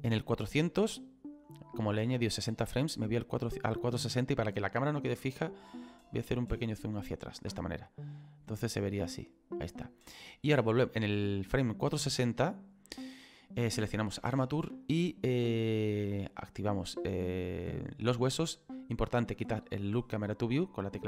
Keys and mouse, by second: 5.8 ctrl+middle click, 8.1 click, 13.9 click, 17.3 click.